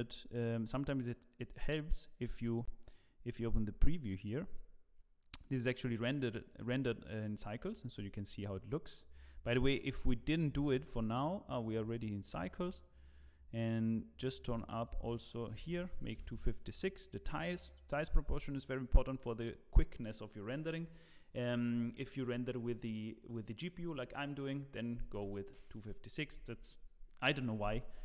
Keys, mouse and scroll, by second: 1.3 click, 2.4 click, 10.2 click, 13.4 click.